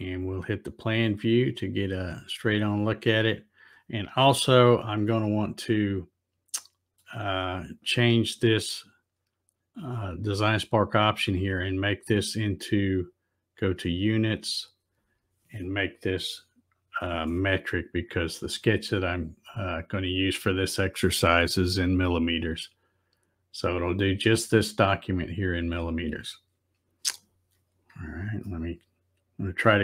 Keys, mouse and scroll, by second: 0.4 click, 5.1-6.7 shift+middle drag, 8.7 click, 10.9 click, 14.0 click, 18.3 click, 19.9 click, 25.6 click, 28.5 shift+middle click.